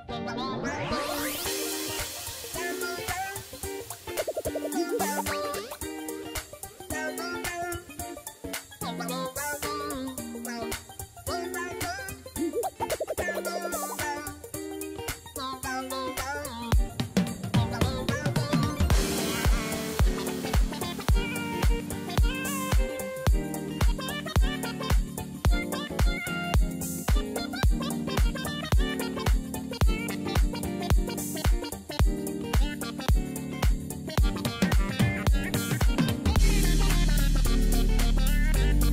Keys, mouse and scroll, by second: 5.7 double click.